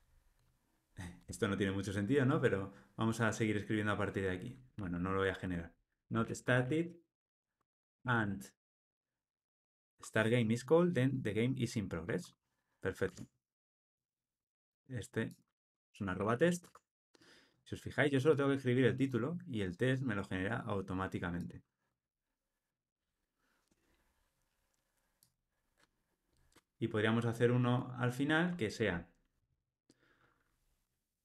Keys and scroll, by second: 1.2 Tab, 4.7 super+z, 13.1 Tab.